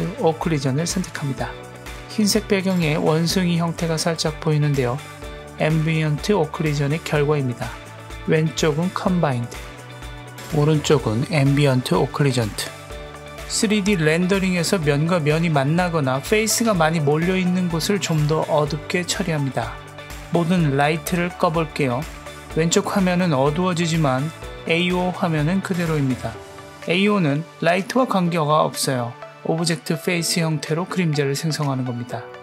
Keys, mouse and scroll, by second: 3.1 click, 4.3-5.4 scroll up 1, 7.7 click, 8.9 click, 21.4 click, 21.8 click, 22.1 click, 26.7 click, 28.7 click, 29.3 click, 29.9 click, 32.2-32.4 drag.